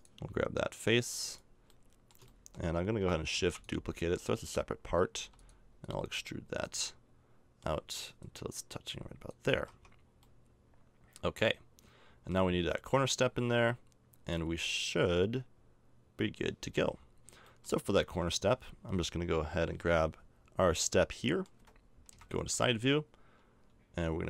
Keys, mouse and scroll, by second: 0.7 click, 0.7 right click, 1.7 middle click, 2.5 right click, 3.4 shift+d, 5.2 e, 5.8 click, 9.5 a, 9.7 Tab, 11.3 middle click, 13.2-15.1 middle drag, 16.5 middle click, 18.1 Tab, 19.7 l, 22.1 KP_1, 22.5 KP_5.